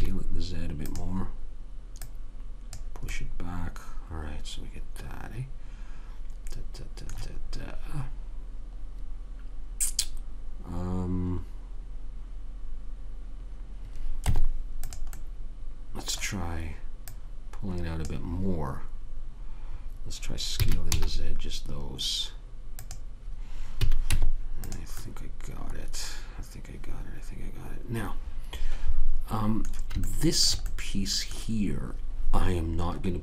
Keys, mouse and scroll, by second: 2.3 click, 3.5-4.9 middle drag, 14.6 Tab, 17.4 click, 20.9 s, 24.1 a, 24.4 Tab, 30.4-33.2 middle drag.